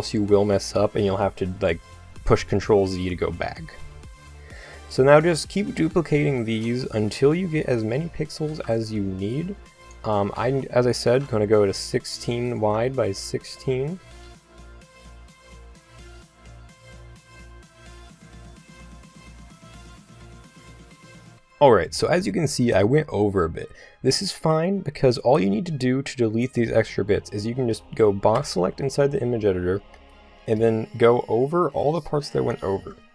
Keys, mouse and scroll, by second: 4.3 a, 4.6-6.0 middle drag, 6.3 shift+d, 8.5 g, 10.3 a, 10.5 a, 11.1 shift+d, 12.8 click, 14.3-19.9 typing, 21.1 a, 21.3 click, 22.9 a, 28.3 b.